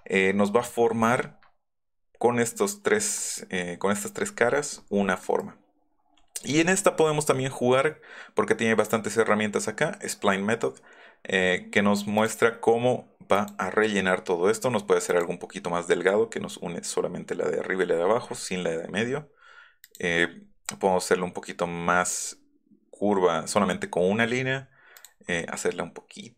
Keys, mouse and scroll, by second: 1.2 middle click, 3.2 click, 12.2 click, 13.4 click, 15.1 click, 19.9 click, 20.0 Up.